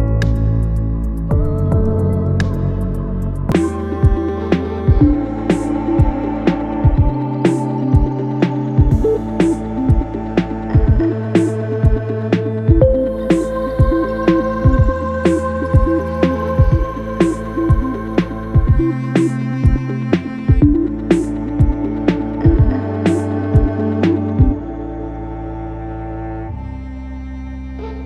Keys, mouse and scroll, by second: 0.2 ctrl+KP_Add, 0.6 ctrl+KP_Add, 1.1 ctrl+KP_Add, 3.6 x, 5.7-8.9 middle drag, 9.8 click, 12.8 middle click, 13.0-17.1 typing, 13.2 click, 13.2 middle click, 13.4 shift+click, 14.1 shift+click, 14.5 middle click, 14.7 click, 15.0 middle click, 15.4 alt+shift+click, 15.9 alt+shift+click, 16.1 middle click, 16.2 scroll up 1, 16.5 alt+shift+click, 16.7 middle click, 17.3 ctrl+b, 22.3 Tab, 23.0-25.0 middle drag, 25.0-25.5 scroll down 3, 25.8-28.0 middle drag.